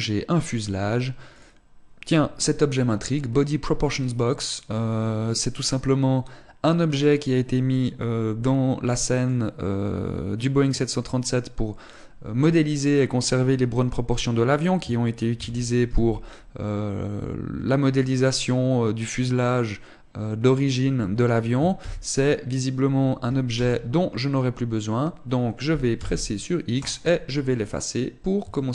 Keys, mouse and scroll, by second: 15.5 ctrl+KP_3, 16.1 KP_5, 22.0 ctrl+KP_1, 23.7 KP_7, 26.2 x.